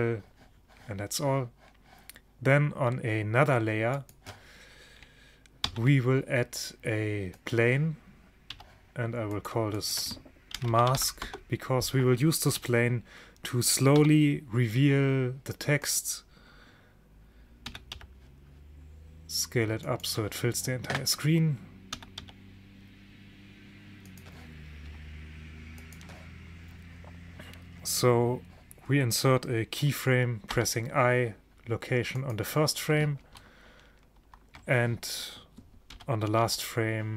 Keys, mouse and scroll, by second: 4.0-5.8 drag, 5.7 shift+a, 8.6 n, 9.4-11.7 drag, 12.7 n, 14.0 s, 17.7 s, 22.0 s, 25.9-27.8 drag, 30.6 i, 34.2 ctrl+shift+Up, 36.0 g.